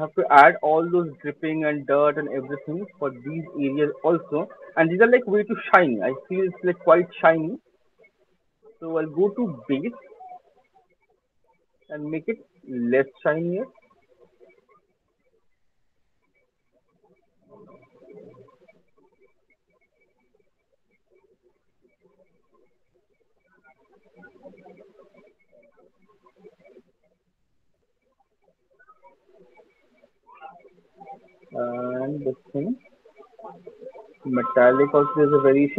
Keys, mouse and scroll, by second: 0.4 alt+click, 1.9 alt+middle click, 2.7 alt+click, 3.1 alt+middle click, 3.7 alt+click, 4.1 alt+middle click, 4.5 alt+middle click, 6.0 alt+click, 6.0 alt+right click, 6.4 alt+middle click, 7.0 alt+click, 8.0 click, 8.2 alt+right click, 8.4 click, 8.8 alt+click, 8.8 middle click, 9.3 alt+middle click, 9.7 click, 10.1 click, 10.4 click, 10.5 alt+click, 11.5 middle click, 14.7 click, 16.0 click, 16.2 click, 17.2 middle click, 18.3 click, 18.8 click, 19.8 click, 20.5 alt+right click, 20.9 alt+middle click, 21.2 alt+middle click, 21.6 alt+click, 21.8 alt+click, 22.0 alt+click, 22.4 alt+middle click, 22.9 alt+click, 23.4 alt+middle click, 25.0 alt+click, 26.0 click, 26.4 click, 26.8 alt+click, 27.2 click, 27.5 alt+click, 27.7 click, 27.9 alt+click, 28.3 middle click, 29.6 click, 29.9 click, 30.3 click, 30.8 click, 31.4 click, 32.2-32.8 scroll, 33.0-33.4 scroll, 34.3-35.3 scroll, 35.3 scroll.